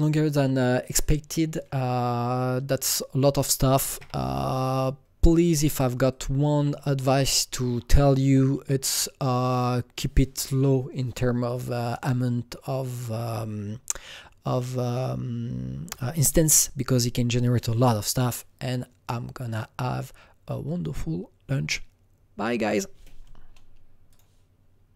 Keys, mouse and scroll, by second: 0.8 click, 4.4 Left, 4.4 click, 5.4 Left, 6.1 click, 6.2 click, 6.6 Left, 6.9 Left, 7.2 Left, 7.7 Left, 8.2 Left, 8.5 Left, 11.5 Left, 12.9 click, 15.1 Left, 24.1 click.